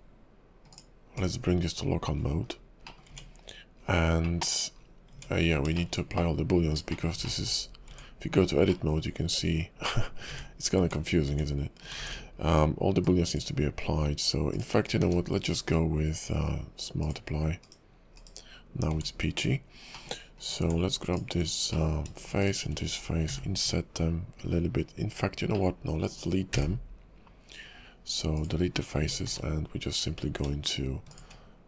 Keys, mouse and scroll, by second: 0.7 click, 1.1 /, 2.4 KP_5, 2.8 middle click, 3.1 Tab, 3.7 scroll down 4, 4.2 middle click, 4.8 scroll down 2, 5.1 Tab, 5.4 scroll down 2, 5.8 middle click, 6.1 middle click, 6.9 shift+middle click, 7.0 shift+middle click, 7.9 Tab, 7.9 middle click, 8.7 middle click, 10.4 Tab, 10.8 Tab, 11.3 Tab, 12.0 ctrl+`, 15.0 q, 18.1 /, 18.9 Tab, 19.4 KP_5, 19.9 middle click, 20.4 click, 20.6 Tab, 21.1 click, 21.7 middle click, 22.4 shift+click, 23.3 i, 26.5 x, 28.7 scroll down 3, 29.0 Tab, 29.3 q.